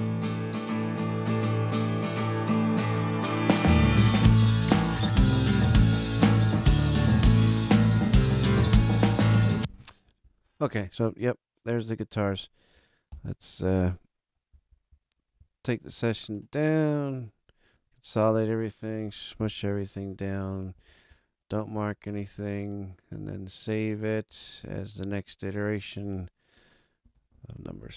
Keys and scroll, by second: 9.3 space, 13.0 ctrl+alt+super+Up, 17.7 alt+a, 19.3 ctrl+alt+super+Up, 27.1 BackSpace, 27.5 6.